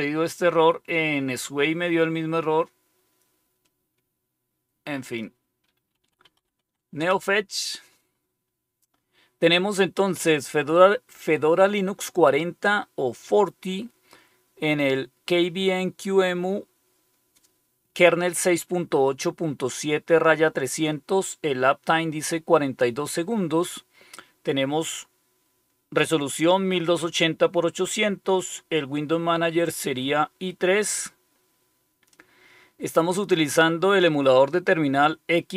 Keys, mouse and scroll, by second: 4.9 click, 5.9-6.8 typing, 6.9 Return, 32.0-34.0 drag.